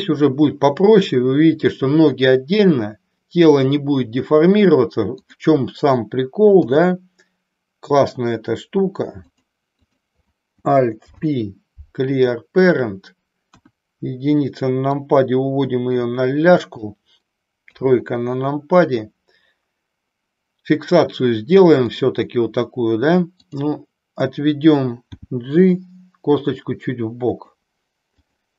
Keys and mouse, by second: 5.2 click, 9.9 click, 10.9 alt+p, 13.5 KP_1, 15.0-16.9 drag, 17.6 KP_3, 21.9 click, 23.4 click, 25.1 g, 28.1 click.